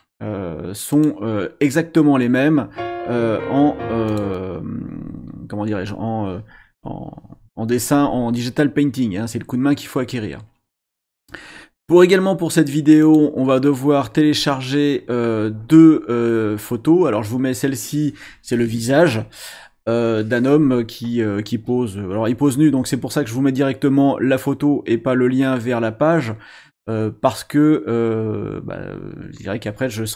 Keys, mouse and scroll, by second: 0.9 click, 4.1 click, 13.0 click.